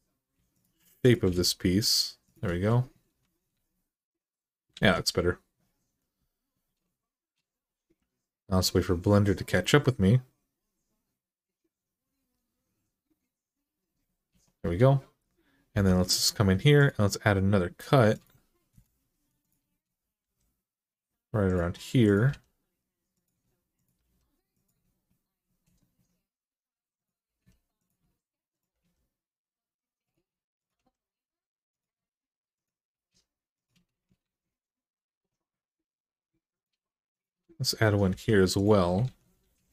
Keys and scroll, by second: 1.0 g, 3.3 alt+z, 4.5 alt+z, 15.5 k, 18.5 Return, 20.0 g, 22.0 g, 23.7 g, 27.0 g, 28.5 g, 30.5 g, 32.7 g, 34.0 alt+z, 37.9 j, 38.8 alt+z, 39.2 g.